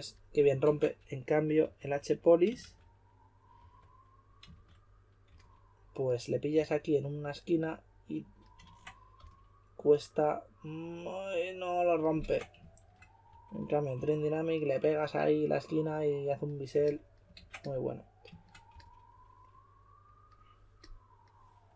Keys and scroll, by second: 0.6 super+z, 1.6-5.2 typing, 6.5 typing, 8.6 super+z, 9.1 s, 12.2 super+z, 12.7-14.4 typing, 17.3 super+z, 18.7 s, 21.6-21.7 typing.